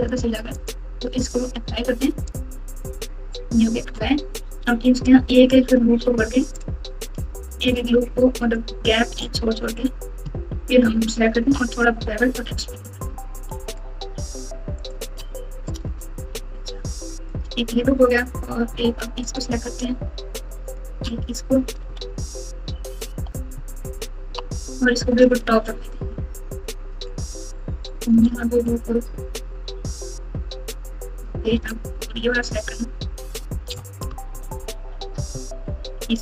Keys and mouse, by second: 0.0 click, 0.6-1.3 drag, 2.3 click, 3.7 Tab, 6.4 alt+click, 8.4 alt+shift+click, 10.5-11.5 ctrl+KP_4, 17.2 alt+click, 19.2 alt+shift+click, 20.7 alt+shift+click, 21.5 KP_Subtract, 21.7 KP_Subtract, 21.8 KP_Subtract, 22.6-23.5 ctrl+KP_8, 23.5-24.3 ctrl+KP_6, 27.1 alt+shift+click, 33.2 alt+shift+click, 34.2 ctrl+KP_8, 34.8 ctrl+KP_8, 35.1 KP_Add, 35.3 KP_Add.